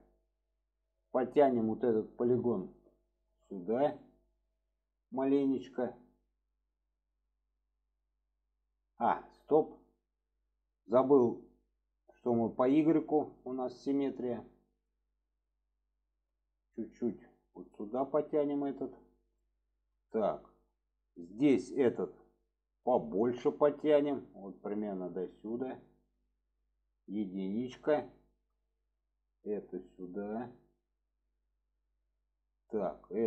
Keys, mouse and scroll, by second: 2.6 click, 3.1 shift+middle click, 4.0 shift+middle drag, 5.6 click, 12.5 click, 13.8 click, 14.9-16.6 middle drag, 17.9 click, 19.4-19.8 shift+middle drag, 20.3 shift+middle drag, 22.3-25.3 drag, 26.2 shift+middle click, 28.2 middle drag, 29.2 drag, 30.0 click, 31.5 shift+middle click, 33.0-33.2 middle drag.